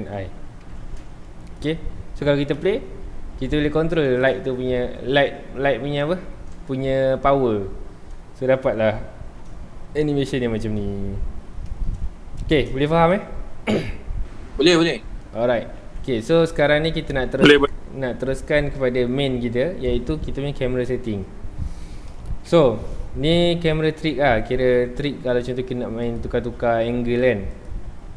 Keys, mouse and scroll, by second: 1.6-2.6 drag, 2.6 space, 4.8 scroll up 2, 11.6 shift+middle click, 12.5 space, 14.2-14.7 middle drag, 14.7-15.2 scroll down 2, 15.2-15.5 middle drag, 15.5 scroll up 2, 15.8 ctrl+s, 16.7 Escape, 23.9 ctrl+o.